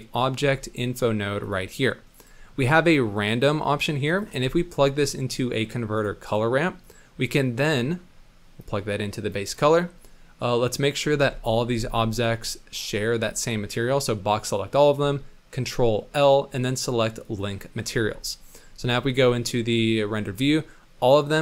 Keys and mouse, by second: 3.3-4.0 drag, 4.4 shift+a, 6.9-7.6 drag, 8.6-9.4 drag, 9.6 click, 11.1 z, 11.7 b, 15.9 ctrl+l, 17.9 z, 18.6 middle click, 18.8 click, 19.0 z, 19.9 click, 20.5-21.0 drag, 21.2-21.4 drag.